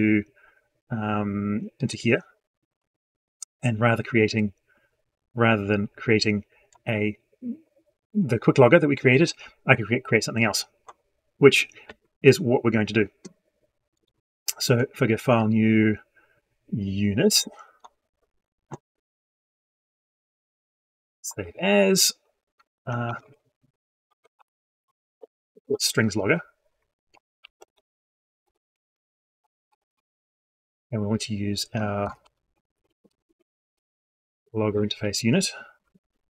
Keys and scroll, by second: 33.8 ctrl+space.